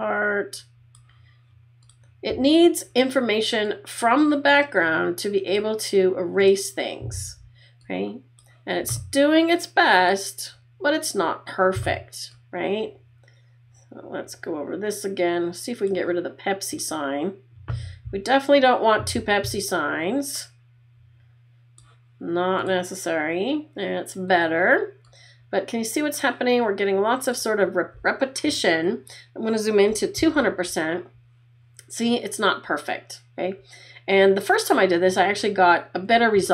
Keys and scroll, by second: 30.3 super+=.